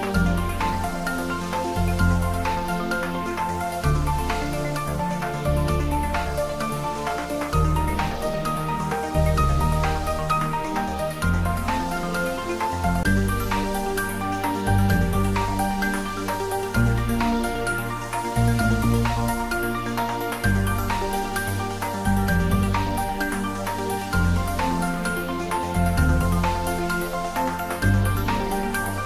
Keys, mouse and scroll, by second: 2.6 click, 4.2 2, 4.9 3, 5.4 scroll down 1, 6.1-7.6 middle drag, 8.2 scroll down 1, 8.3-9.7 middle drag, 9.7-11.4 middle drag, 11.4 ctrl+x, 12.6 ctrl+r, 14.0 click, 24.6 click, 25.2-25.6 scroll down 1, 25.6-28.2 middle drag, 28.2 ctrl+r, 28.8 click.